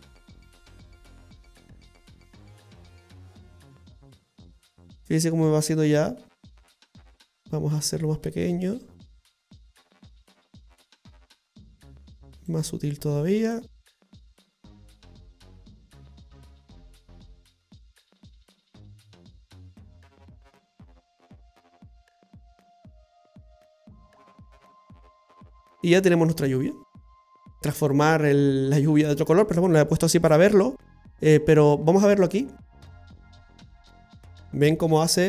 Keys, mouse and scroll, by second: 7.2 click, 12.6 click, 32.3 click, 33.0-33.4 scroll down 2, 33.3 middle click, 34.5 scroll up 1.